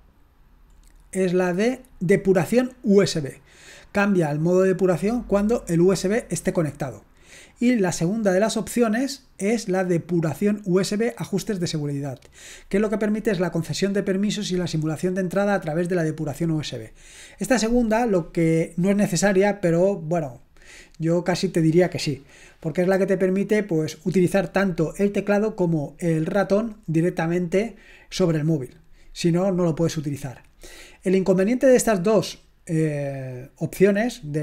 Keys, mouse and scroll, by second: 0.9-2.5 scroll down 1, 7.5-8.9 scroll down 2, 9.4 scroll down 1.